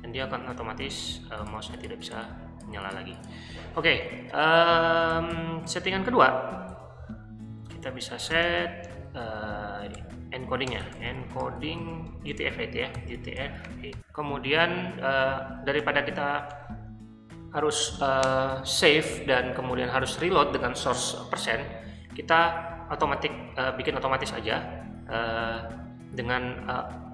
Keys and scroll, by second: 5.1-8.4 typing, 10.0-14.4 typing, 15.8 Return, 16.6 Return.